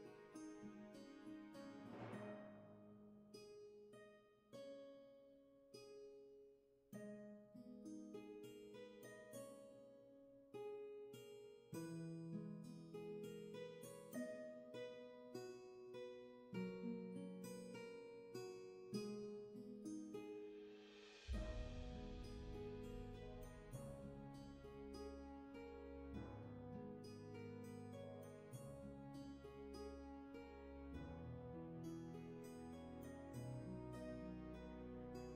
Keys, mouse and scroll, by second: 7.3 ctrl+z, 9.3 ctrl+z, 17.4 ctrl+z, 21.6 ctrl+shift+z, 30.8 ctrl+shift+z, 31.3 ctrl+z, 32.8 ctrl+shift+z.